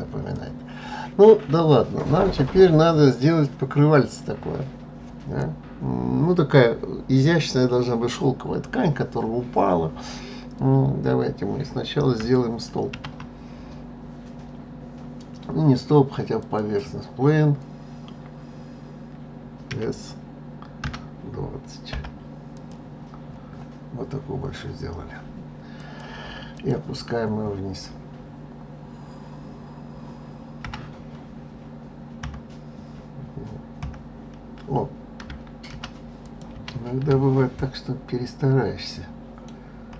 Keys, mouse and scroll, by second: 3.2-3.5 scroll down 3, 12.4 shift+a, 19.3 s, 22.5-23.1 scroll down 3, 23.6-24.0 scroll up 10, 25.3 click, 26.1 click, 26.7-29.1 scroll down 9, 30.2 g, 36.1 ctrl+z, 37.0-39.5 middle drag, 39.5 KP_3.